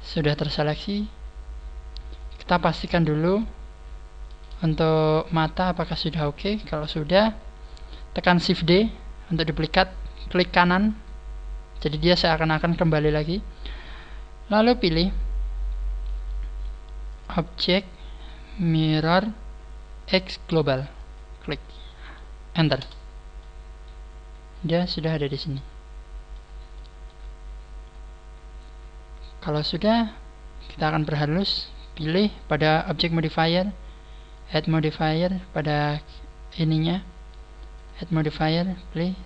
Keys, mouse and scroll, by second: 0.7 right click, 1.8 scroll down 1, 2.1 middle click, 2.8 scroll up 5, 3.3 middle click, 4.4 g, 4.9 middle click, 6.6-6.9 scroll down 2, 7.1 KP_1, 8.5 shift+d, 10.9 right click, 14.7-15.6 scroll up 9, 17.0 click, 17.0 scroll up 2, 23.3 middle click, 26.6 shift+middle click, 27.2 scroll down 1, 27.8 scroll down 1, 29.9 scroll down 2, 33.0 click, 34.2 click, 35.6 click, 35.6 right click, 37.6 click.